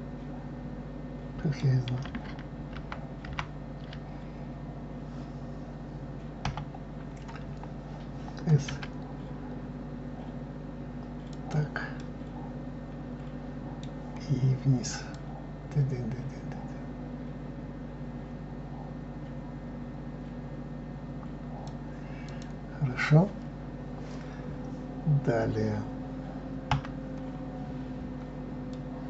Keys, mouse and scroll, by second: 3.2 ctrl+z, 6.4 KP_7, 8.7 s, 11.9-14.9 middle drag, 15.1-18.1 drag, 22.2 click, 26.7 KP_Divide, 27.7-28.1 scroll down 2, 28.7-29.0 middle drag.